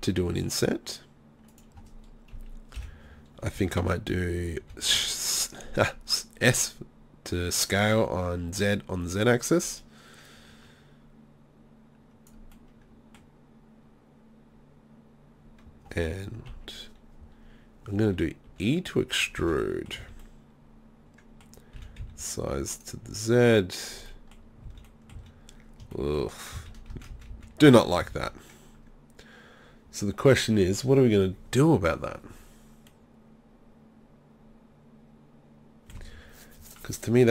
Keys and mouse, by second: 1.6 click, 2.4 KP_3, 2.8 KP_1, 4.6 s, 9.6-12.3 drag, 16.5 KP_3, 18.5 e, 19.4 z, 19.7-21.2 drag, 20.0 z, 21.8 s, 22.8-24.1 drag, 24.7 z, 25.2 z, 26.7 ctrl+z, 26.9 ctrl+z, 27.1 ctrl+z, 27.3 ctrl+z, 27.7 ctrl+z, 28.1 ctrl+z, 32.9-35.3 middle drag.